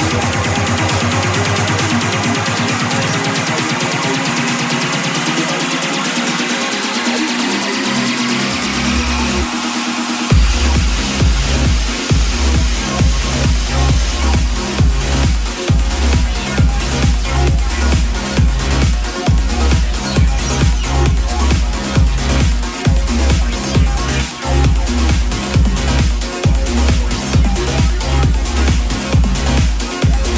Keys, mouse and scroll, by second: 1.1 click, 4.6 KP_5, 4.7 KP_0, 9.3-30.3 drag.